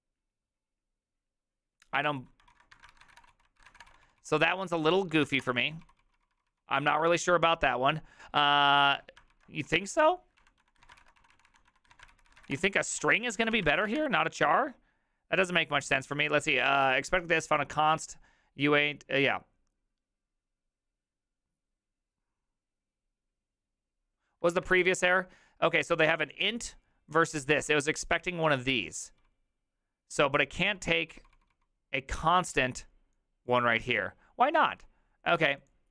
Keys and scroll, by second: 2.5-7.0 typing, 9.3 alt+", 9.3 alt+{, 9.3 ctrl+c, 9.4-13.5 typing, 13.7 ctrl+c, 13.8 Up, 13.9 Return, 24.5 ctrl+a, 24.6 [, 24.8 ctrl+u, 29.9-30.2 typing, 33.7 j.